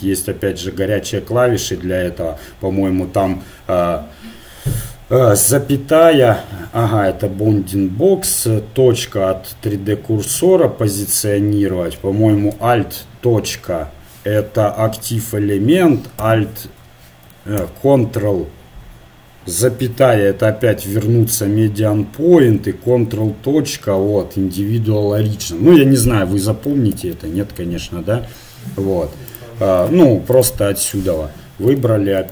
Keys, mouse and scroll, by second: 5.4 ,, 8.2 ., 10.3 ., 12.5 alt+., 13.5 alt+., 16.2 alt+,, 17.6 ctrl+,, 23.1 ctrl+., 27.0 ctrl+,, 30.3-31.4 drag.